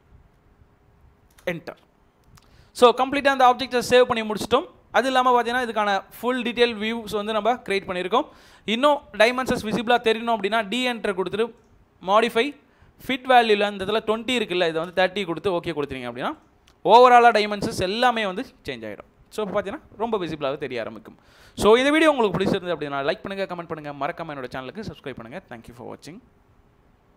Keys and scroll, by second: 0.9 7, 1.3 Return, 9.5 d, 10.2 space, 14.4-15.3 typing.